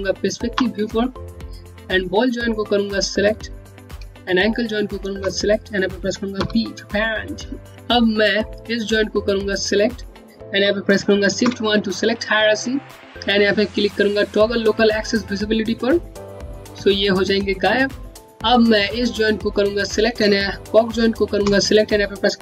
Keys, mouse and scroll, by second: 1.0 scroll down 1, 1.4 scroll up 1, 2.1 scroll down 1, 2.9 click, 4.7 shift+click, 6.1 p, 7.9 click, 10.6 click, 15.6 click, 18.1 click, 20.8 shift+click.